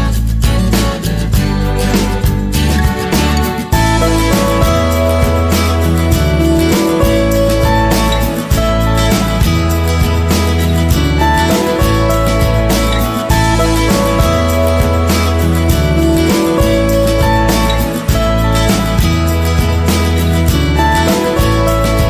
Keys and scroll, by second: 9.8 ctrl+=.